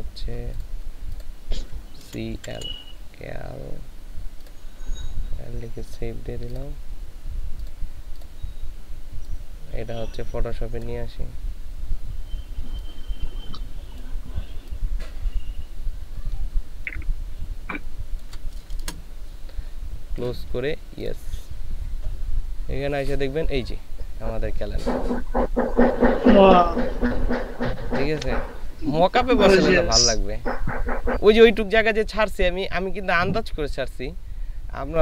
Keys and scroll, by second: 2.1 c, 2.6 ctrl+alt+l, 18.8 shift+Return.